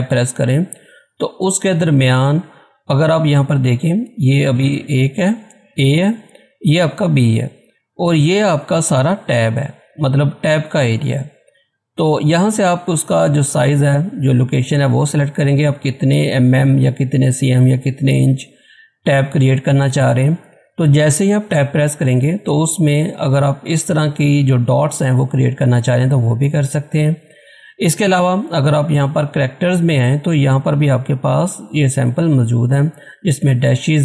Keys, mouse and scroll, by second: 29.6 click.